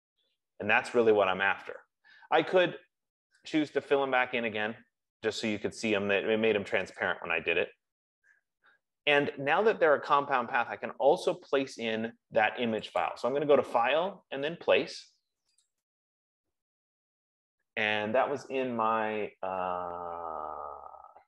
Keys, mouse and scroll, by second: 4.0 click, 7.5 click, 13.5 click, 15.9 click.